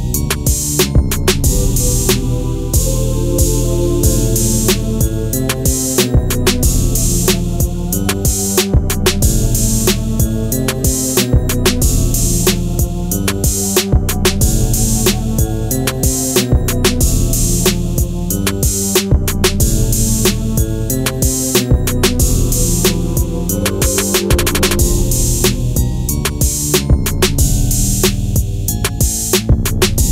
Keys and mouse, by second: 0.2 click, 1.1-2.5 drag, 3.6 click, 4.5-6.1 drag, 7.0 click, 7.9-9.7 drag, 11.2-11.6 drag, 12.6 click, 13.2-15.4 drag, 18.1 n, 19.8-21.1 drag, 21.2 n, 26.2 click, 27.7 click, 27.8 click, 28.7-30.1 drag.